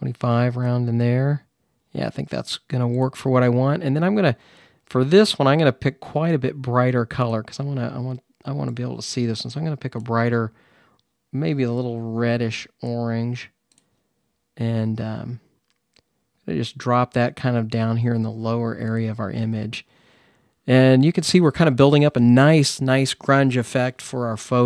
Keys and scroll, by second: 14.6 ].